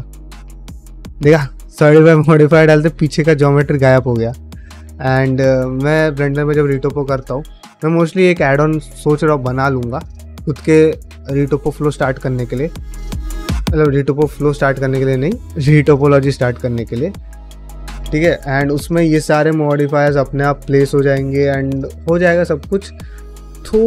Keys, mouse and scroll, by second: 0.2 shift+middle click, 2.3-5.5 middle drag, 5.6 shift+middle click, 6.1 ctrl+middle click, 6.7 shift+middle click, 7.1 middle click, 16.7 middle click, 18.2 middle click.